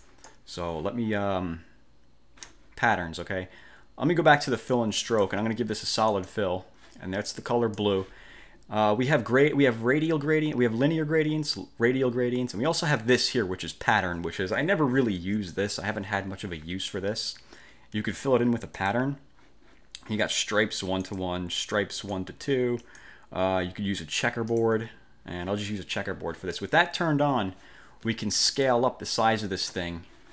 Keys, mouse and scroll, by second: 0.1 click, 4.9 click, 6.3 click, 7.4-8.1 drag, 18.9 click, 21.2 click, 22.1 click, 22.9 click, 24.6 click, 28.7-29.9 ctrl+shift+drag.